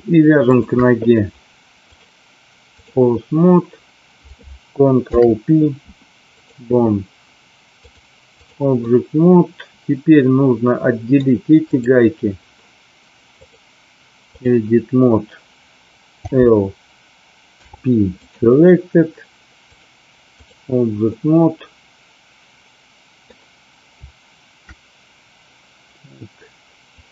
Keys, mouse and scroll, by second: 0.4 shift+click, 1.9-2.9 drag, 4.9 ctrl+p, 7.9-8.4 drag, 8.8-11.2 middle drag, 13.4-14.5 drag, 16.2 l, 17.4 p, 19.8 click, 21.0-23.1 middle drag, 27.0 click.